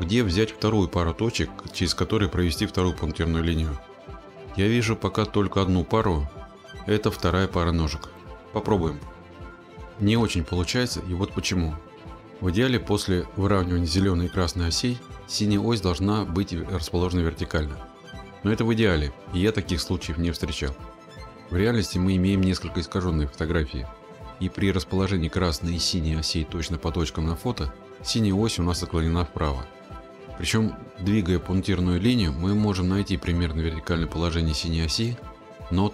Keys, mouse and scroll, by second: 0.0 scroll, 2.8 scroll, 9.7-10.8 drag, 10.8-12.9 middle drag, 12.9-20.4 drag, 21.8-26.7 drag, 26.8 click, 27.9-32.8 drag.